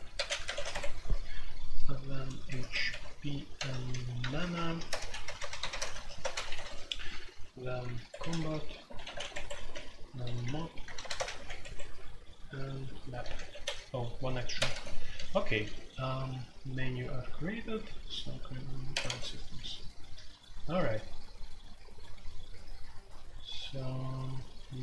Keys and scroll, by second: 0.0-15.4 typing, 0.7 Escape, 2.8 Escape, 16.6-17.4 typing, 18.8-19.5 typing.